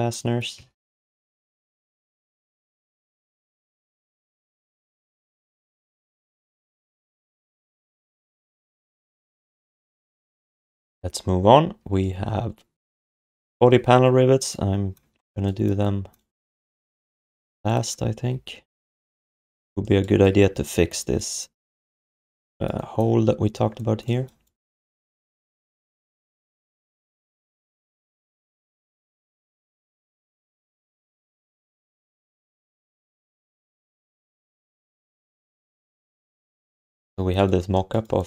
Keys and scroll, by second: 0.6 alt+shift+d, 0.8 ctrl+s, 7.6 ctrl+s, 8.4 6, 10.5 ctrl+s, 18.2 f, 20.4 1, 22.0 5, 26.3 f, 27.2 alt+shift+d, 27.4 ctrl+s, 33.7 shift+h.